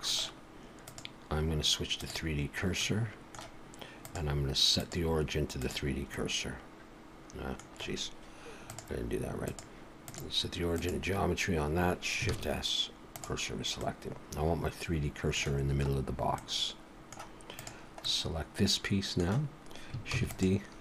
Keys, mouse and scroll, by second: 0.9 click, 3.9 click, 6.1 middle click, 8.7 click, 9.5 click, 12.3 shift+s, 13.8 middle click, 15.9-16.3 scroll up 1, 16.3 middle click, 17.5 click, 18.0 middle click, 20.1 shift+d.